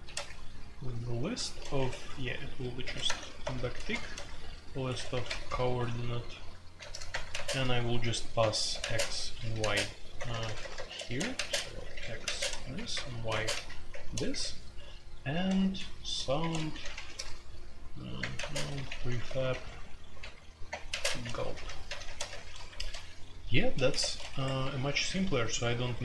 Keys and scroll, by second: 0.0-26.0 typing, 1.7 Escape.